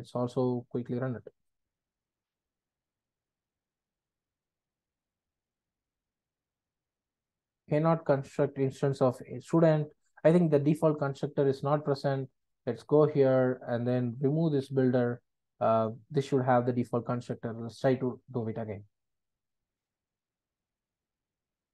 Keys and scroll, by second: 0.9 ctrl+r, 14.5 super+BackSpace, 17.3 ctrl+r.